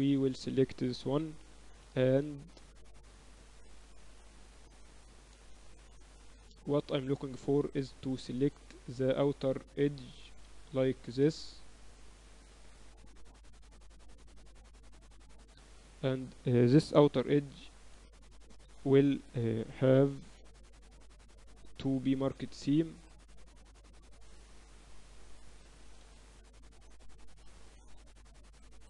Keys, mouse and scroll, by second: 0.7 middle click, 1.3 right click, 2.2 KP_Divide, 2.7-3.9 middle drag, 3.0 Tab, 5.5 middle click, 5.7 middle click, 8.8-10.7 middle drag, 10.3 a, 10.9-11.9 middle drag, 12.1 middle click, 15.8-18.3 right drag, 18.3 shift+b, 18.8-19.9 drag, 21.1 KP_6, 21.3 middle click, 21.3-22.2 KP_6, 24.1 middle click, 24.4-25.7 drag, 25.7-28.8 middle drag.